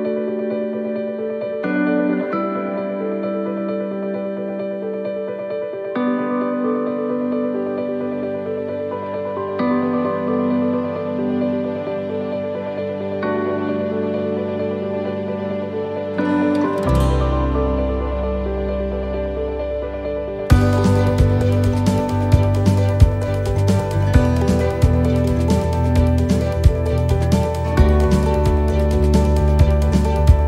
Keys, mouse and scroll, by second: 0.4 x, 3.0 right click, 4.1 l, 5.0 x, 6.6 right click, 7.3 alt+shift+right click, 8.4 f, 9.7 right click, 10.2 alt+shift+right click, 11.3 f, 15.1 click, 17.5 s, 21.4 click, 22.8 s, 25.7 middle click, 28.7 middle click, 28.7 click.